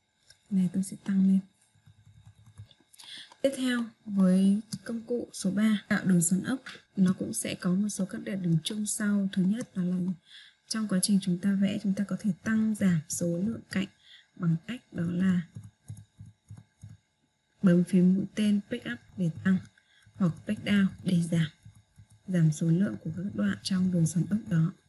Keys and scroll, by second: 16.4 Page_Up.